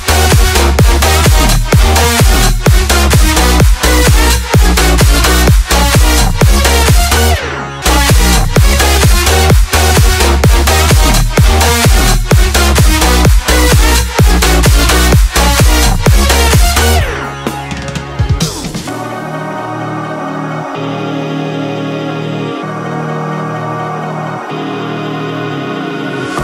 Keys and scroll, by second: 17.4 2, 17.8 Return, 19.8 Up, 26.1 Left.